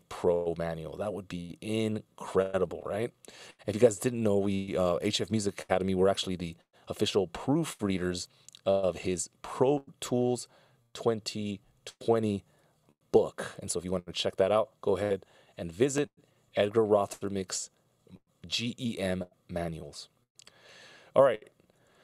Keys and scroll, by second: 3.8 super+s.